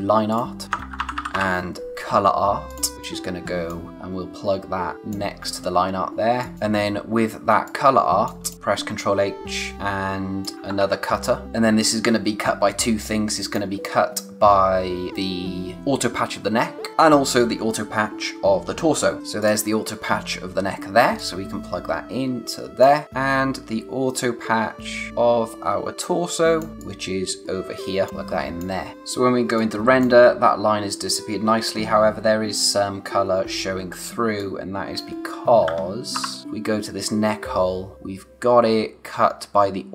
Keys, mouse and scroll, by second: 0.0-1.8 typing, 0.3 click, 2.7 click, 3.0 click, 6.3 space, 6.4 click, 6.5 space, 6.9-7.6 scroll up 1, 7.6 space, 7.6 click, 8.1 space, 8.4 click, 8.5 h, 9.7 click, 10.8 ctrl+v, 11.4 space, 13.0 click, 13.3 space, 19.2 space, 19.4 click, 23.0 space, 26.8 click, 29.4 space, 29.5 click, 29.9 space, 33.8-34.1 scroll down 1, 34.1 space, 34.3 click, 36.1 o, 36.4 space.